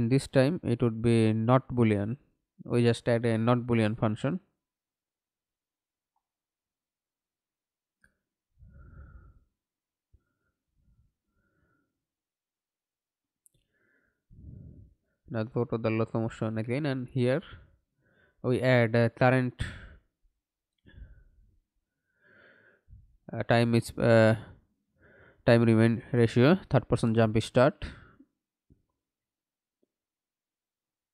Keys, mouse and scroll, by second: 3.5 Delete, 5.3 double click, 9.0-11.6 typing, 19.1 double click, 20.1 right click, 22.1-25.9 typing, 29.4 BackSpace, 30.1 BackSpace.